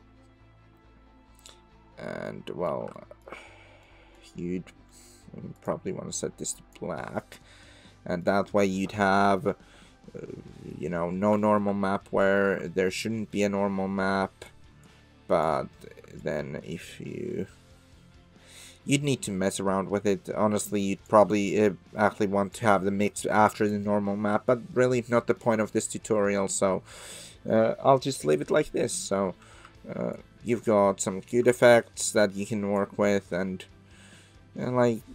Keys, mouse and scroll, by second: 2.2-2.7 middle drag, 2.9 shift+middle drag, 3.8 middle click, 5.0 click, 5.5 click, 7.1-7.9 middle drag, 7.9 click, 8.0 middle click, 8.1 click, 8.1 middle click, 9.2-10.7 middle drag, 11.4 shift+middle drag, 12.2 shift+middle click, 12.6 middle click, 14.2 click, 14.8 click, 16.2-20.5 shift+drag, 20.5 shift+middle click, 22.5 click, 23.3 click, 25.0-25.4 middle drag, 28.6-29.1 middle drag, 30.2-31.3 shift+middle drag, 32.2-32.8 middle drag, 34.1 middle click.